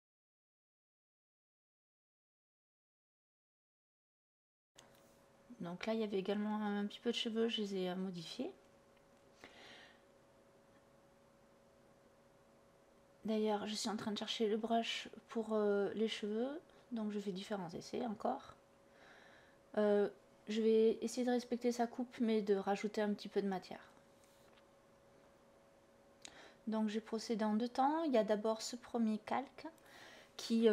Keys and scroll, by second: 16.5 ctrl+z, 26.3 Delete, 29.5 i.